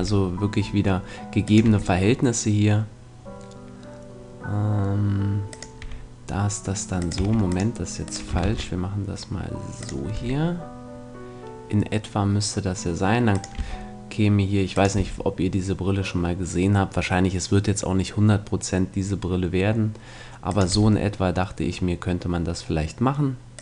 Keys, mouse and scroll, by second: 1.5-3.5 drag, 1.6 e, 5.6-7.2 drag, 5.8 e, 7.2 x, 8.4 shift+d, 10.1 e, 10.7-11.8 drag, 13.5-15.4 drag, 13.6 e, 15.0 e, 20.7 e.